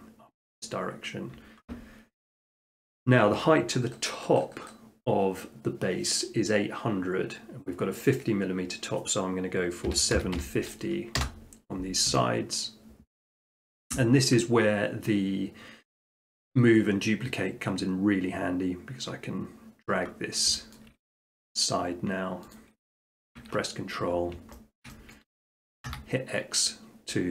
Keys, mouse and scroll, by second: 9.9-10.4 typing, 11.2 Return, 12.1 Tab, 13.1 typing, 13.6-14.6 middle drag, 16.3-17.4 drag, 20.1 middle click, 20.4 middle click, 20.8 shift+middle click, 22.6 click, 23.9-24.4 scroll, 24.8 shift+middle click, 25.2 middle click, 25.9 x.